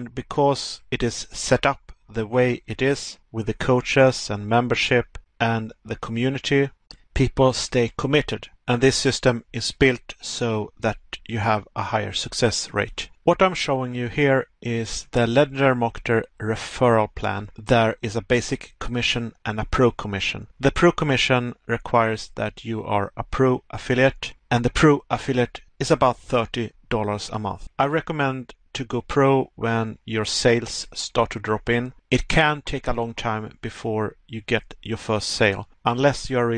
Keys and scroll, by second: 2.9 Pause, 4.6 Pause, 6.4 Pause, 12.1 Pause, 19.2 Pause, 26.2 Pause, 30.1 Pause, 33.4 Pause, 36.3 Pause.